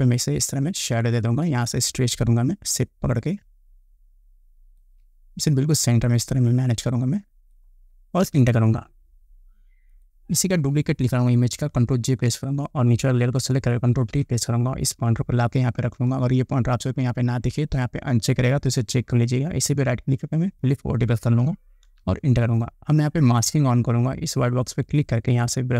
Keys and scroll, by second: 8.5 Return, 12.3 ctrl+j, 14.2 ctrl+t, 22.1 Return.